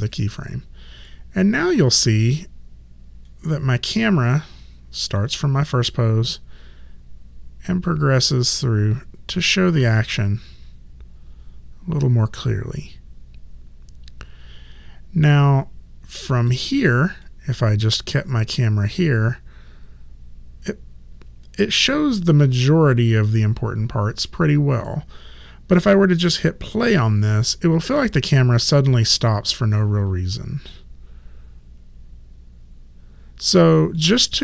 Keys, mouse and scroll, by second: 1.1 click, 17.3 click, 28.2 click, 34.0 click.